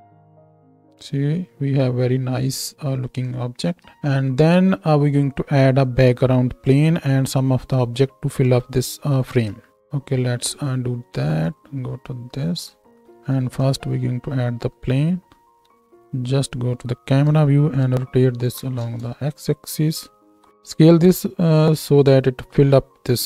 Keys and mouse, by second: 0.7 space, 3.9 ctrl+space, 9.7 z, 11.6-23.2 middle drag, 13.0 shift+c, 13.3 shift+a, 15.6 KP_0, 17.2 r, 20.3 s.